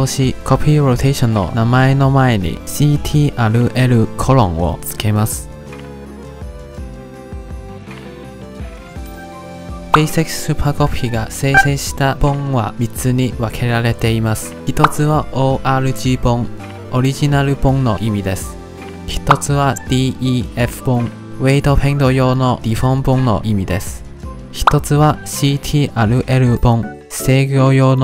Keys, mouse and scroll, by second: 0.6-3.5 drag, 5.6 click, 6.1 click, 6.2 click, 6.6 click, 6.9 click, 7.2 click, 7.4 click, 7.8 drag, 8.2 click, 8.6 click, 8.8 click, 9.2 click, 9.4 click.